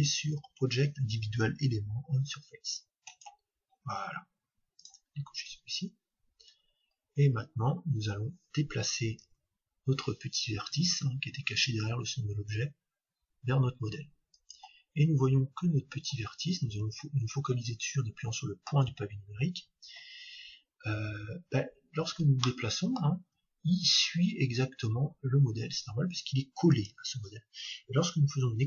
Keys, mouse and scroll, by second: 3.1-6.7 drag, 6.6-10.3 middle drag, 7.3-9.2 scroll up 1, 9.2 scroll up 1, 14.5-16.4 drag, 15.1-17.1 middle drag, 21.3-24.3 middle drag, 23.2 g, 26.8-28.6 drag.